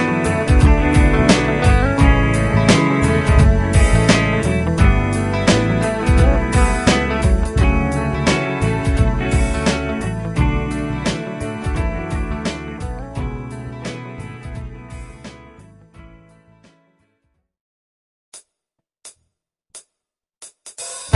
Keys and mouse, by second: 9.8 shift+click.